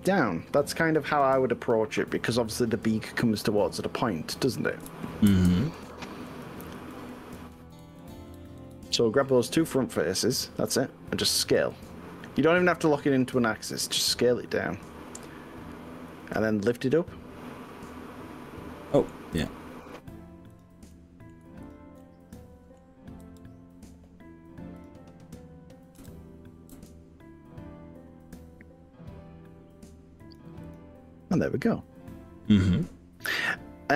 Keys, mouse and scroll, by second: 0.1 click, 0.7 click, 4.5 click, 4.9 ctrl+z, 5.3 ctrl+z, 6.5 ctrl+z, 7.1 ctrl+z, 7.5 ctrl+z, 8.5 ctrl+z, 8.8 ctrl+z, 9.4 ctrl+shift+z, 11.6 s, 15.1 click, 16.2 click, 16.5-19.2 middle drag, 19.4 click, 20.6 click, 20.9 middle click, 21.8 shift+click, 22.0 middle click, 23.2 g, 24.8 click, 26.0 KP_3, 26.8 g, 30.2 click, 33.8 scroll up 1.